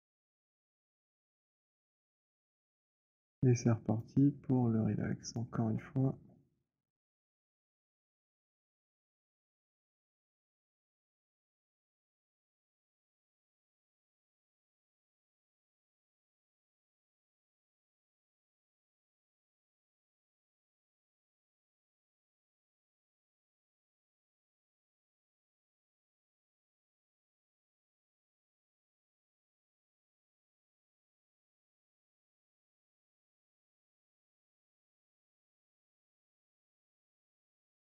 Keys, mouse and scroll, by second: 0.1 alt+middle click, 1.5 alt+middle click, 1.9 alt+middle click, 2.4 w, 3.7 right click, 3.7 click, 5.1 right click, 11.8 click, 12.3-12.9 scroll, 13.0 middle click, 13.3 alt+middle click, 15.4 alt+middle click, 15.4 click, 19.5 click, 21.6 click, 22.6 click, 23.8 click, 24.9 click, 31.6 click, 32.1 alt+click, 33.3 click, 36.2 click.